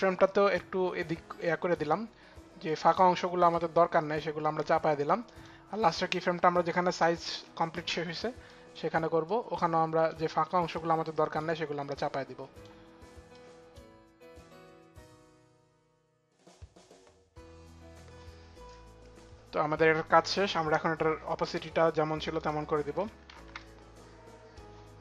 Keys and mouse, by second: 1.1 click, 2.3 click, 3.2 click, 3.9 click, 5.0 click, 6.4 click, 8.9 click, 10.5 click, 11.7 click, 13.0 click, 13.8 click, 14.2 click, 14.4 click, 14.6 click, 14.8 click, 15.0 click, 15.2 click, 15.7 click, 15.9 click, 16.1 click, 16.3 click, 16.6 click, 16.8 click, 17.1 click, 17.3 click, 22.2 click, 23.0 click, 23.0 shift+t, 24.2 click, 24.2 shift+t.